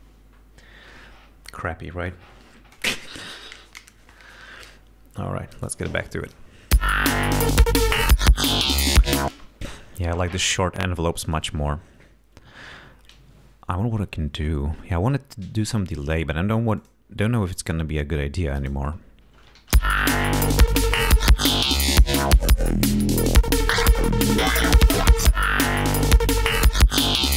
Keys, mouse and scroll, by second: 6.2 click, 6.9 space, 9.4 space, 9.7 click, 11.3 right click, 15.0-15.3 scroll up 2, 16.9 click, 19.8 l, 22.0 click, 24.5 click, 25.8 click, 27.0 click.